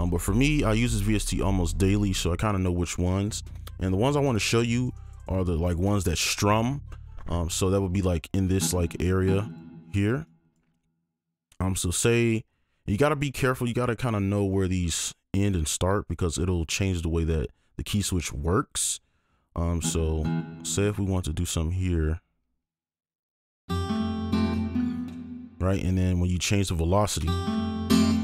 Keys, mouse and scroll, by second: 8.9 double click, 10.2 right click, 12.5-12.9 scroll up 1, 12.9 scroll down 1, 16.1-16.8 scroll down 1, 18.3-18.8 scroll up 1, 18.8-20.2 scroll down 1, 20.2 double click, 22.0 alt+click, 23.6 alt+space, 23.6 click, 25.6 space, 25.7 ctrl+click, 27.2-28.2 alt+scroll up 1, 27.2 space.